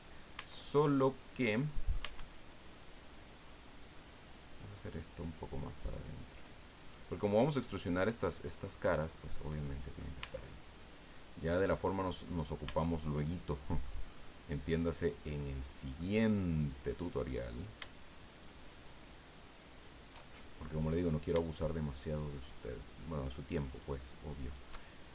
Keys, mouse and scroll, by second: 0.3 Tab, 0.7 right click, 1.4-2.1 middle drag, 2.0 Tab, 2.7-3.0 scroll up 1, 4.7-7.1 drag, 9.1 click, 10.2 Tab, 10.5-10.9 scroll down 1, 11.6-11.9 scroll up 1, 12.0 right click, 12.6 Tab, 13.2 click, 16.0 click, 17.4 right click, 18.3 shift+right click, 19.0 shift+right click, 19.7 shift+right click, 20.3 shift+scroll up 1, 22.4 shift+right click, 23.1 shift+right click, 23.7 shift+right click, 24.4 shift+right click, 24.9-25.1 shift+scroll down 2.